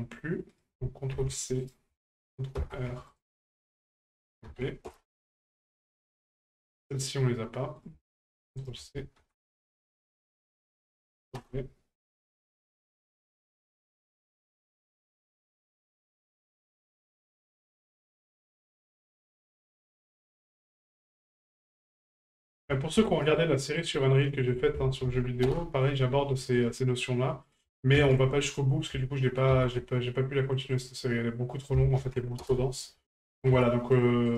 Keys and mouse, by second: 0.5-1.8 ctrl+drag, 4.0 ctrl+click, 6.9 right click, 7.9 ctrl+click, 10.7 ctrl+click, 14.0 click, 16.3 right click, 17.7-18.9 ctrl+drag, 20.9 ctrl+click, 23.2 ctrl+r, 24.8 ctrl+click, 26.5 right click, 27.4-28.6 drag, 31.5 click.